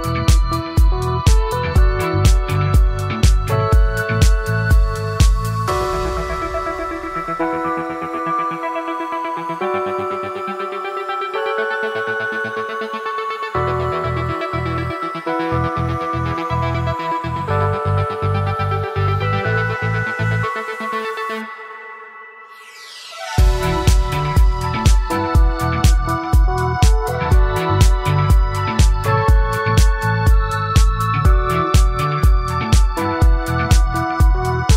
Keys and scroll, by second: 18.1 ctrl+z, 33.3 F9.